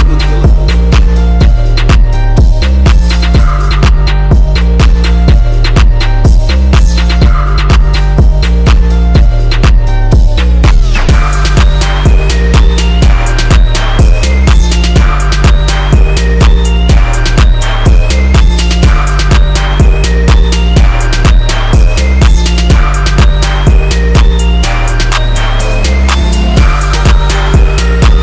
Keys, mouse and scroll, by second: 1.7-3.7 drag, 5.1-8.2 drag, 9.1 click, 11.5 click, 12.4 click, 14.9 click, 16.4 scroll down 1, 16.7 click, 20.5 click, 27.3 click.